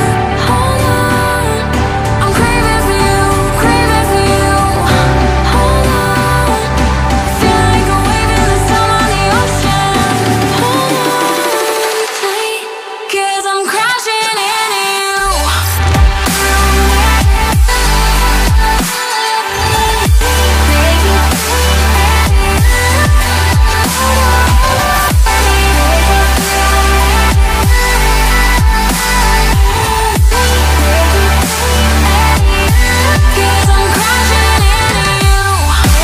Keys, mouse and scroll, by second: 8.9 double click, 30.1 right click, 31.4 double click, 33.7 right click.